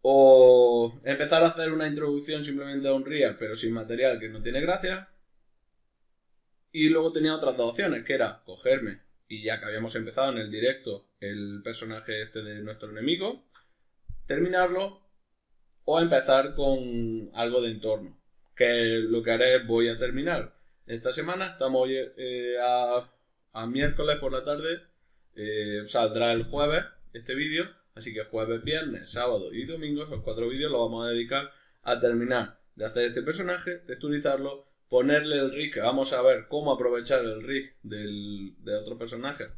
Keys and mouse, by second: 0.6 middle click, 7.7 middle click, 19.4 middle click, 30.9 middle click.